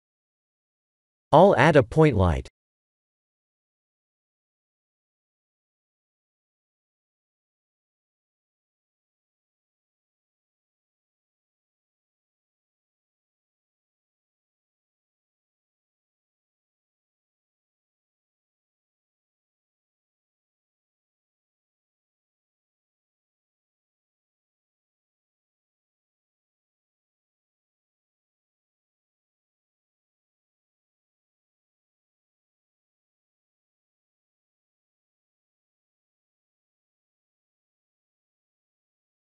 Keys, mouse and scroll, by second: 1.0 click, 1.4 shift+a, 8.7 g, 13.2 KP_7, 15.3 click, 16.4 g, 20.6 KP_0, 23.4 click, 25.9 click, 27.5 1, 27.6 1, 29.3 click, 30.1 1, 30.2 1, 37.0 KP_1, 38.1 g.